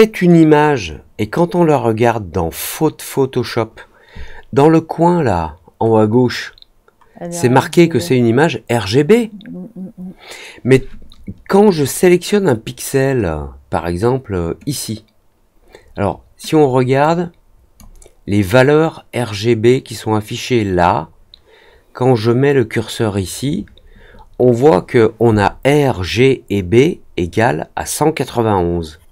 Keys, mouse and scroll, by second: 16.9-17.7 drag.